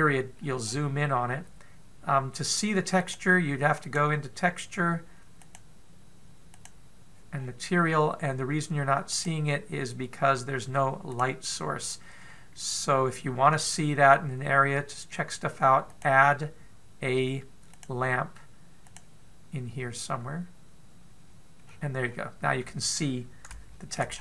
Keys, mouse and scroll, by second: 1.0 scroll up 2, 1.2 scroll down 2, 3.5 click, 7.3 click, 7.9-8.4 scroll up 4, 8.4-8.8 scroll down 4, 9.7 click, 11.8 click, 16.4 click, 22.2-23.0 scroll down 2, 22.6-24.1 scroll up 5, 24.1 shift+middle click, 24.1 scroll up 1.